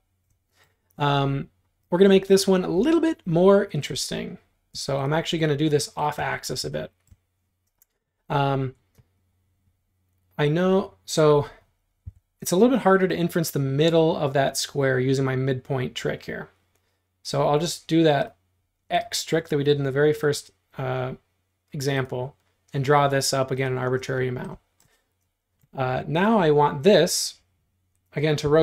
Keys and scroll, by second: 4.8 q, 6.2 space, 12.1 l, 24.0 space, 28.5 q.